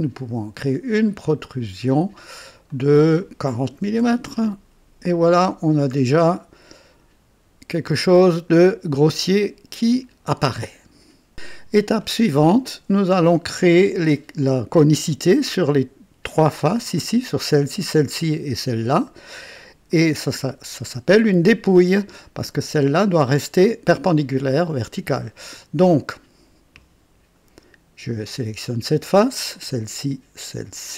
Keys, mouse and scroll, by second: 1.2 click, 2.7 click, 3.7 KP_4, 4.0 KP_0, 4.2 Return, 5.3 typing, 5.6-6.0 scroll down 2, 6.3-8.7 drag, 7.0-7.7 typing, 9.1-10.3 drag, 13.3-14.3 drag, 14.9-15.6 drag, 19.8-22.7 drag, 24.1-24.7 drag, 26.7-27.5 drag, 28.2 click, 29.6 ctrl+click, 30.7 ctrl+click.